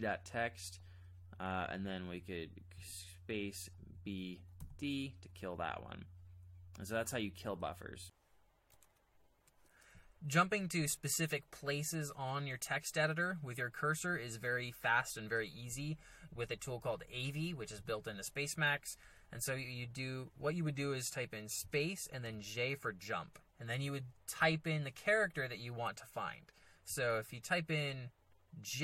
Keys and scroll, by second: 2.7 space, 3.8 b, 4.8 d, 8.9 alt+Tab, 21.6 space, 22.2 j.